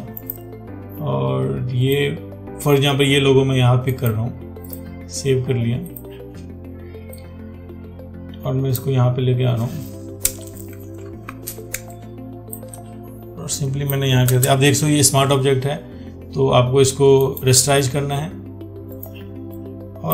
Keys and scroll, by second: 11.5 ctrl+t.